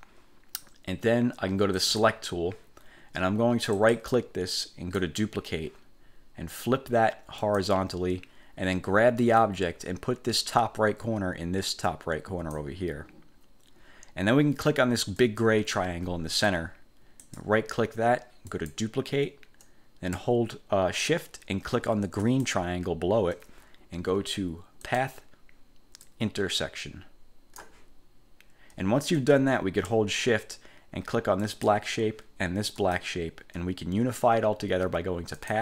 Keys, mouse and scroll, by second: 1.9 click, 3.9 click, 5.1 click, 7.5 click, 9.5-12.8 drag, 15.4 click, 17.4 click, 18.6 click, 22.4 shift+click, 25.0 click, 26.2-27.9 drag, 31.6 shift+click, 32.9 shift+click, 35.5 click.